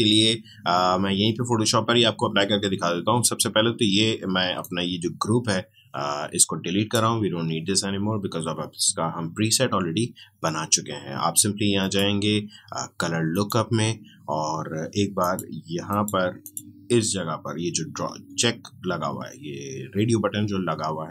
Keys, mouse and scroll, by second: 4.5-9.4 drag, 11.8 click, 18.1 Escape.